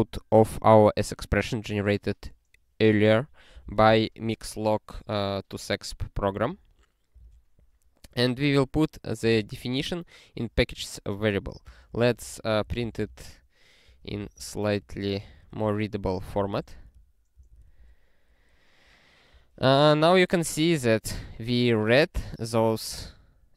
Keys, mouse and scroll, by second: 6.2 ctrl+n, 6.4 ctrl+n, 7.2 ctrl+e, 8.2 click, 9.4 ctrl+e, 11.4 click, 11.7 Return, 11.9 Return, 12.0-17.3 typing, 17.4 ctrl+e.